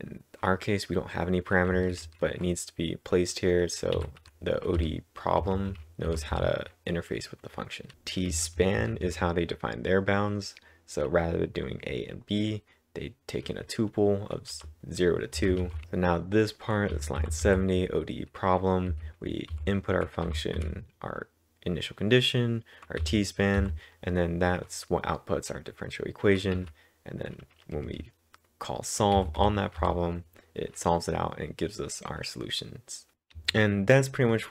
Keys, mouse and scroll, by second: 1.7 typing, 6.1-8.8 typing, 14.5 typing, 15.6-19.4 typing, 23.0 typing, 26.6 typing, 27.6-28.4 typing, 33.3 typing.